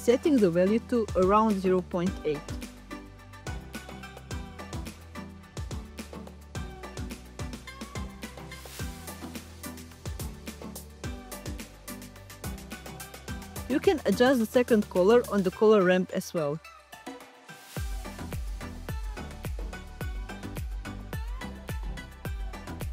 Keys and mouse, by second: 16.0 click, 16.8 click.